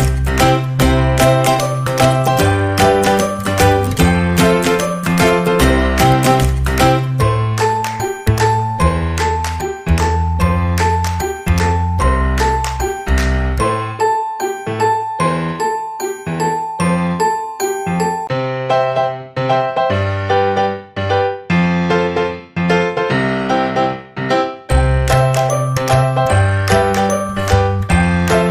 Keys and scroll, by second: 10.2 KP_2, 10.5 KP_0, 11.0 Return, 13.3 Escape, 18.1 Escape.